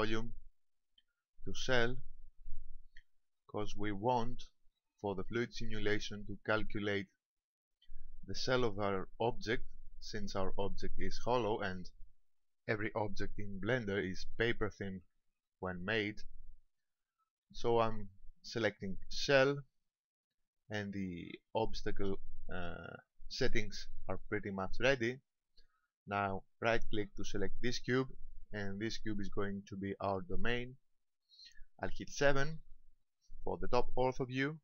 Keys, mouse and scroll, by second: 0.3 click, 4.1 shift+middle click, 5.1 middle click, 15.2 Tab, 17.3 Tab, 22.9 click, 27.9 right click, 32.5 KP_7.